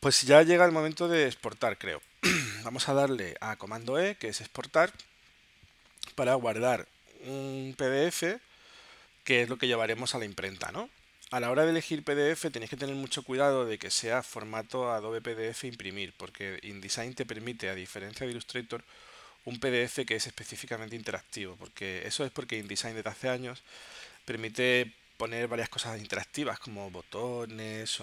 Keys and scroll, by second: 1.4 space, 3.6 super+e.